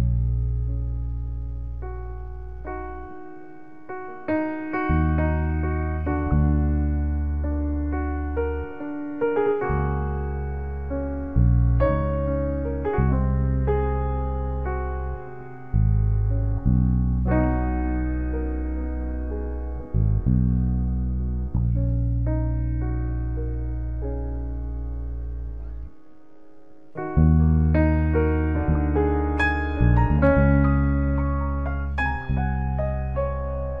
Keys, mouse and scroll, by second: 3.8 ctrl+b, 4.6 ctrl+b, 18.3 s, 20.0 click.